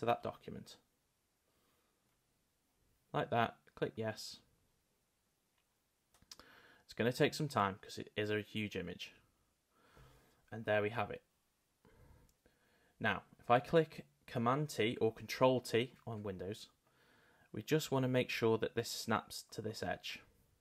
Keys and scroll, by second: 14.7 super+t.